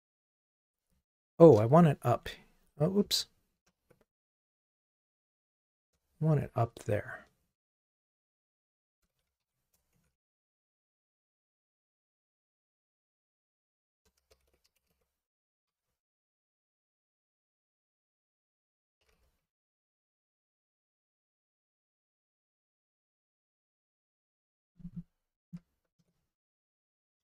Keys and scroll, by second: 2.3 shift+super+Up, 3.0 shift+super+Down, 6.3 alt+shift+Up, 8.2 alt+shift+Up, 8.4 super+d, 9.6 alt+shift+Down.